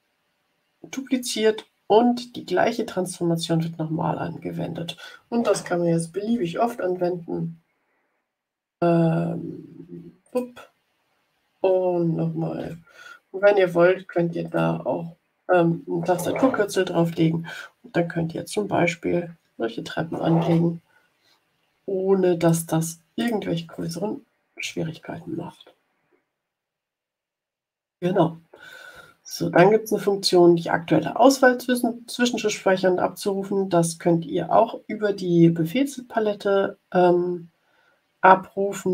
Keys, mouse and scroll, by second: 9.1-9.4 scroll down 2, 10.2 click, 13.7 scroll down 2, 14.4 click, 21.6 Delete, 22.4 click, 22.9 Delete, 23.1 click, 23.5 Delete, 23.7 click, 24.5 Delete, 26.3-26.7 ctrl+scroll down 4, 27.3-27.9 scroll up 2.